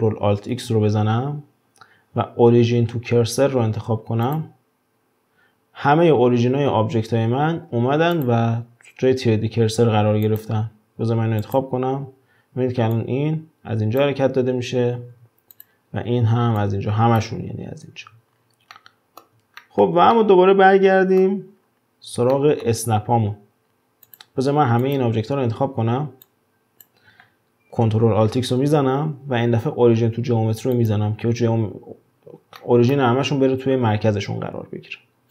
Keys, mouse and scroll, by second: 0.5 ctrl+alt+x, 8.1 drag, 10.3 click, 11.4-15.0 drag, 15.0 ctrl+z, 15.5 click, 16.6-17.9 drag, 17.9 ctrl+z, 18.3 scroll down 5, 18.8-21.6 middle drag, 21.6-22.3 scroll up 6, 22.3-24.1 shift+middle drag, 24.1 drag, 24.8 click, 25.8 w, 26.3 click, 28.6 ctrl+alt+x, 32.6-35.3 shift+middle drag.